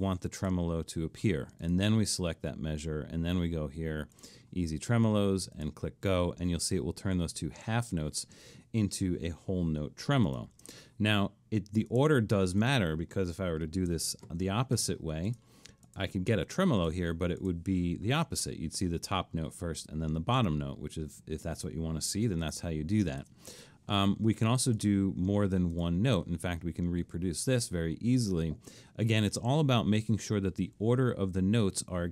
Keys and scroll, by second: 10.6 Delete, 13.9-14.4 typing, 15.5 Escape, 23.2 Delete.